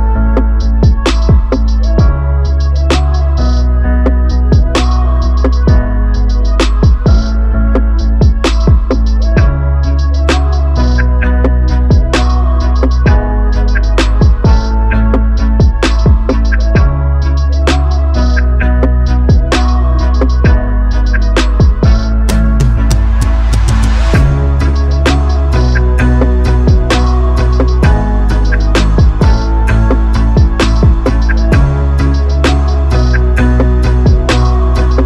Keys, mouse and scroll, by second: 0.3 click, 19.5-21.8 drag, 21.8 r, 23.0 i, 24.7 click, 27.8 shift+s, 29.3 r, 32.6-33.9 drag.